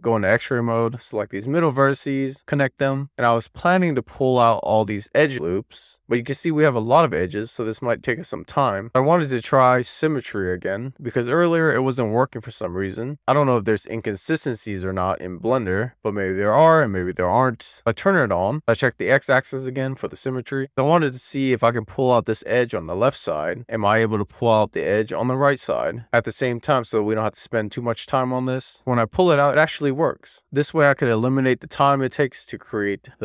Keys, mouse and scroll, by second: 0.0 scroll up 1, 0.3-1.1 scroll down 1, 1.1 click, 2.2 click, 2.8 alt+z, 3.1 middle click, 3.7 scroll down 1, 3.9 middle click, 4.6 shift+middle click, 5.2-11.9 middle drag, 7.5-7.9 scroll down 2, 12.2-12.8 scroll up 2, 12.8 middle click, 14.0 2, 14.2 scroll down 1, 14.3 shift+middle click, 14.9 middle click, 15.3 scroll down 1, 15.6 scroll up 1, 15.7 middle click, 16.1-16.7 scroll up 2, 16.7 click, 17.0 middle click, 17.4 middle click, 17.7 scroll down 1, 17.9-19.0 drag, 29.0 click, 30.1 super+z, 30.3 shift+middle click, 31.2 shift+middle click, 31.6-32.0 scroll down 2, 32.0 shift+middle click, 32.2-33.2 middle drag.